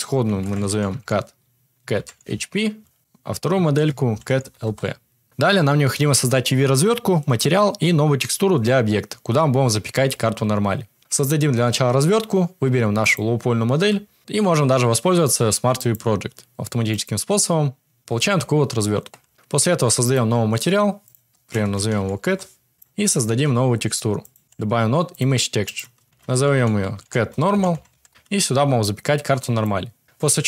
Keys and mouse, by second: 12.9 click, 13.7 Tab, 14.2 a, 14.2 u, 19.3 Tab, 20.0 click, 21.1-22.2 drag, 22.7-23.2 drag, 23.4 shift+a, 26.0-29.5 shift+drag, 29.9 click.